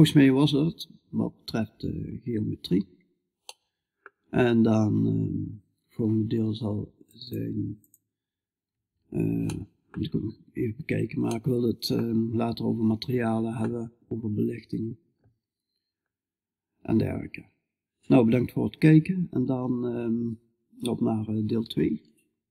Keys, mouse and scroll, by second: 2.5-5.8 middle drag, 8.9 middle click, 10.8-19.6 middle drag.